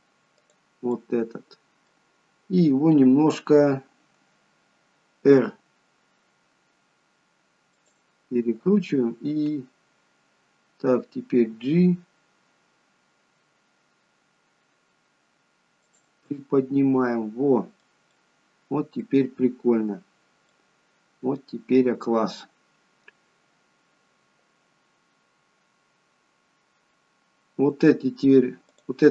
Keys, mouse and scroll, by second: 0.5 click, 1.0 middle click, 5.5 r, 11.5 g, 16.4 middle click, 18.2 middle click, 22.4-23.3 scroll down 1, 23.3-23.7 scroll down 1, 26.3-26.9 scroll up 2, 28.8 click.